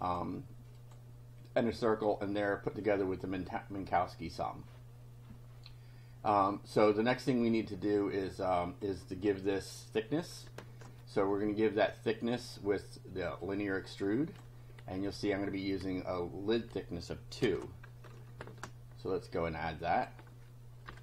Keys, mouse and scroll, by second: 0.1 click, 0.8 click, 8.4 click, 10.6 alt+Tab, 12.4 click, 13.4-14.6 drag, 17.4 ctrl+c, 18.5 alt+Tab, 20.0 click, 20.7-21.0 typing.